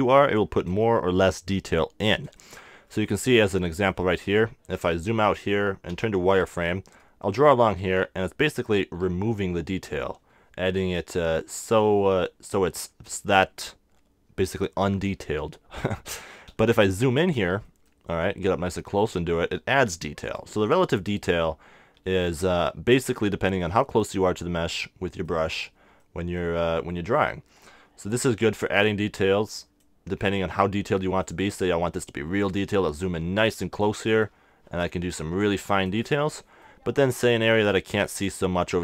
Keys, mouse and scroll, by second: 2.4-5.9 middle drag, 5.9 z, 6.9-8.8 drag, 16.8 super+z, 18.9-20.8 drag, 22.9-28.9 middle drag, 25.7 z, 27.5-31.3 drag, 30.8 super+z, 31.3-33.7 middle drag, 34.2-37.0 drag, 37.6-38.8 middle drag.